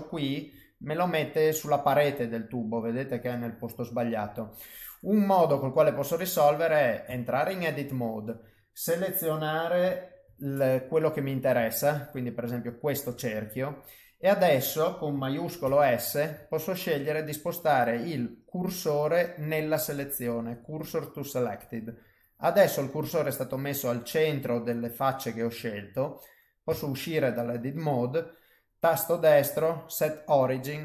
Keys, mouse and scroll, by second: 0.3 shift+right click, 1.0 middle click, 2.2 middle click, 3.2 middle click, 5.5 middle click, 7.1 Tab, 10.2 2, 10.9 click, 11.7 alt+click, 12.2 middle click, 15.6 shift+s, 22.6 middle click, 24.2 middle click, 26.7 Tab, 27.4 middle click, 28.5 right click.